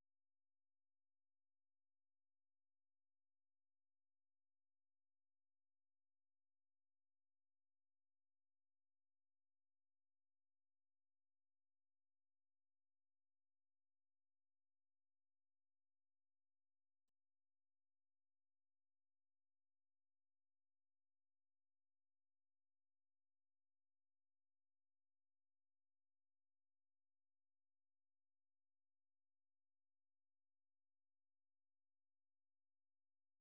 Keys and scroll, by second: 19.2 ctrl+c, 20.7-23.0 typing, 31.5 BackSpace, 31.5 v, 31.7 Return, 33.1 ctrl+c.